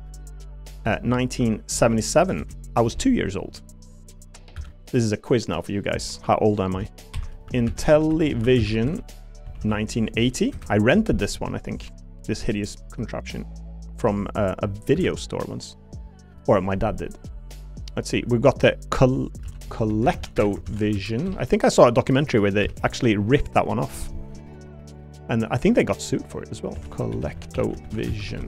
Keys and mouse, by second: 1.9 7, 4.5 F2, 7.9 l, 11.6 shift+click, 14.9 F2.